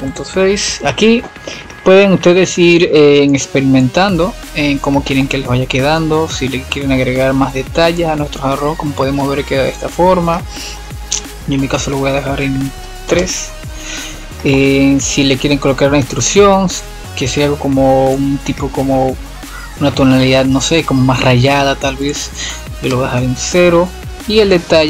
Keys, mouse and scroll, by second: 0.1 click, 1.2 click, 2.8-7.2 drag, 11.1 F7, 14.5 click, 19.1-20.6 middle drag, 20.6 scroll down 1, 20.9-22.4 middle drag, 22.4-23.2 drag.